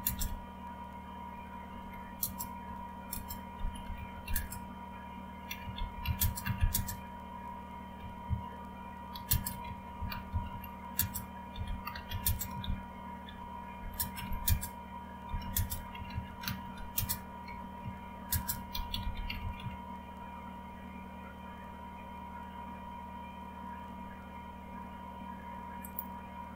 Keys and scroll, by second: 1.7-20.1 typing.